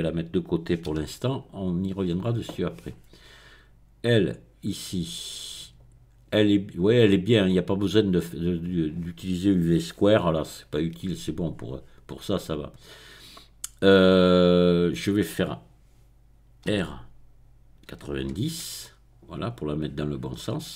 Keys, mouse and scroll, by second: 1.0 g, 1.6 click, 1.9-4.1 middle drag, 4.1-6.0 drag, 16.8 r, 17.9 KP_9, 18.5 KP_0, 19.5 click, 20.2 middle click.